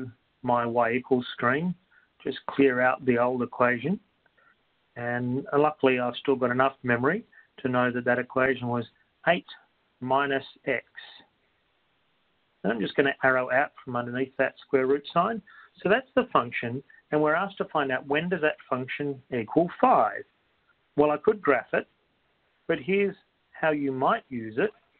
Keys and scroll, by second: 2.5 ,, 10.2-11.0 typing, 12.5 x, 14.9 Right.